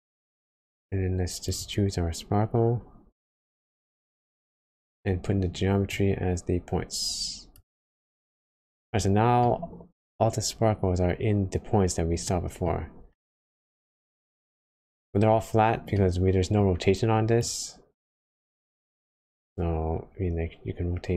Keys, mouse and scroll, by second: 0.2 scroll up 1, 8.6-9.3 scroll down 2, 9.4 middle click, 10.2 scroll up 1, 12.2 middle click, 13.5 middle click, 15.9 middle click, 16.6-17.0 scroll up 2, 17.4 click, 19.5 click.